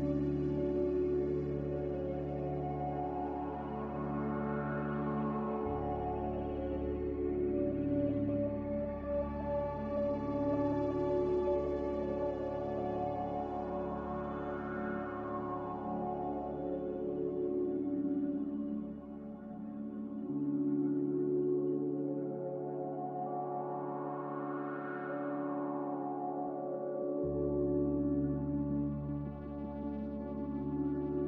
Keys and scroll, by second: 10.4 ctrl+c, 13.4-14.3 typing, 17.1 a.